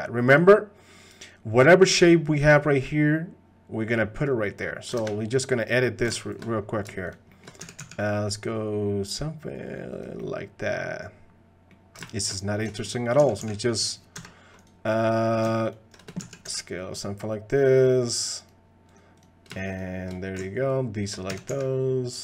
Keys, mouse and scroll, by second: 5.1 ctrl+Tab, 7.1 shift+click, 7.3 shift+click, 7.6 s, 10.2 click, 10.6 middle click, 11.1 click, 12.7 shift+click, 13.2 s, 15.6 ctrl+click, 18.9 click, 20.7 ctrl+click, 21.3 s.